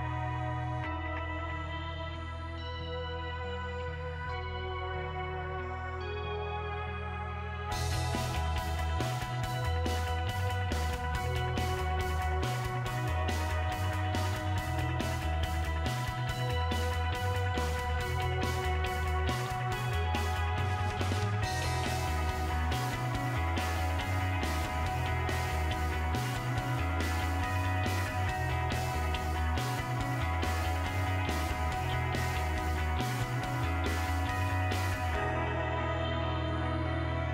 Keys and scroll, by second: 25.1-25.8 typing.